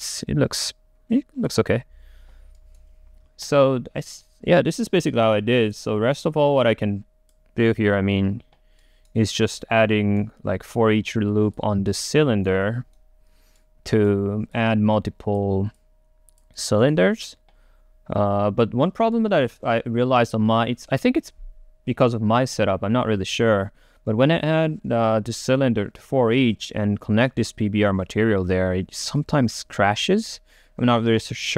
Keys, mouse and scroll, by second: 10.0-11.6 right drag, 11.6 click, 12.4-14.6 right drag, 14.6-16.6 drag, 16.6-19.0 right drag, 19.3-21.6 right drag, 29.3-31.5 right drag.